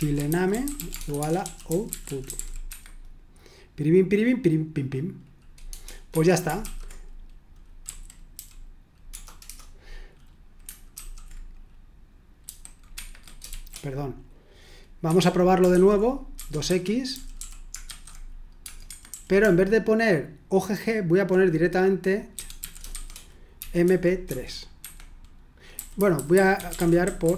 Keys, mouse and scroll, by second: 0.0-3.1 typing, 6.1 Escape, 6.6 typing, 7.8-9.6 typing, 12.4-13.5 typing, 15.1 Escape, 15.2-21.2 typing, 22.4-25.9 typing, 26.5 Escape.